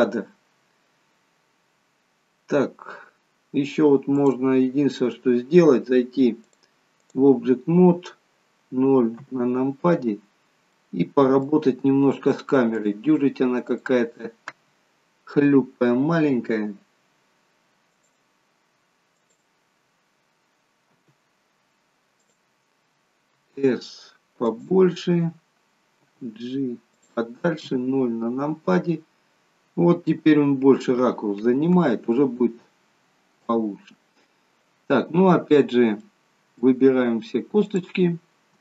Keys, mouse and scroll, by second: 4.1 click, 6.4 click, 9.2 KP_0, 10.7 middle click, 12.8 click, 13.8 click, 15.4 g, 17.9 click, 19.2 click, 20.8 g, 23.3 s, 26.0 g, 27.7 KP_0, 33.5 KP_0, 35.4-36.0 scroll up 2, 36.1 middle click, 36.8 scroll down 1, 37.6 click.